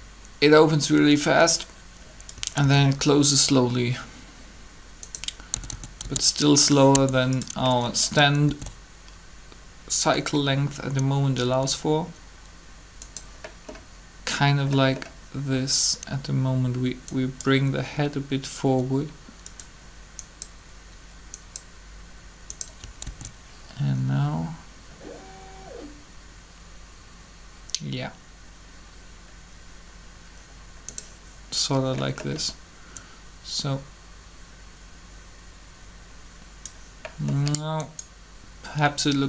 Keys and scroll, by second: 2.6 alt+a, 5.5-6.9 typing, 8.4 alt+a, 23.0 alt+a.